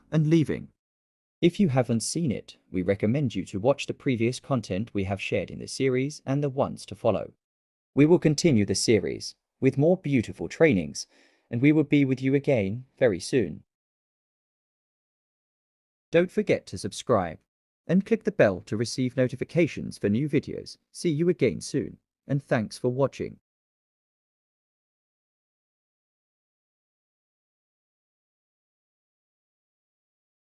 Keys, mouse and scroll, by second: 10.0 click.